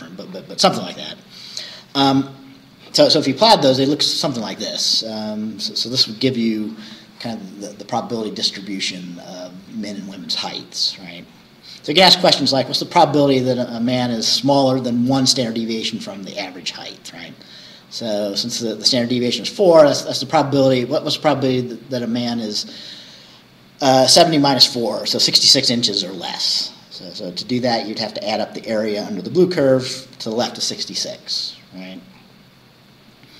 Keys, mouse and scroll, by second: 11.3-11.7 scroll down 2, 12.4 scroll down 2, 13.2 scroll down 2, 16.4-16.8 scroll up 2, 31.3-32.5 scroll down 4.